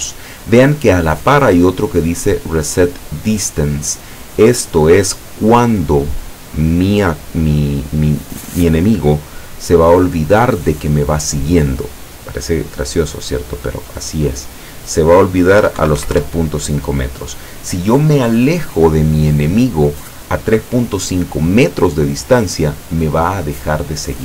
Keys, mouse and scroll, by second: 14.2 click, 15.7 KP_3, 15.8 KP_Decimal, 16.0 KP_5, 16.2 KP_Enter.